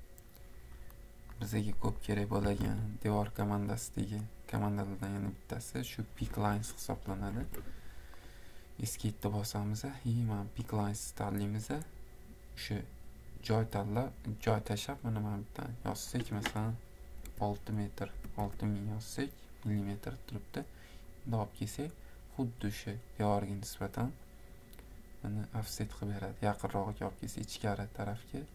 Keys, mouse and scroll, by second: 1.5 click, 1.5 scroll, 1.9 click, 2.2 click, 2.3-3.2 typing, 4.4 click, 6.3 Escape, 7.0 Escape, 7.3 Escape, 7.5 Escape, 13.5 click, 14.3 scroll, 14.3 middle click, 14.4 middle click, 14.7 middle click, 15.0 middle click, 15.5-15.8 scroll, 15.8 click, 17.3-18.1 typing, 17.5 scroll, 22.0 click, 22.3-23.2 scroll, 25.8 click, 26.4 scroll, 26.4 middle click, 26.5 middle click, 26.6 middle click.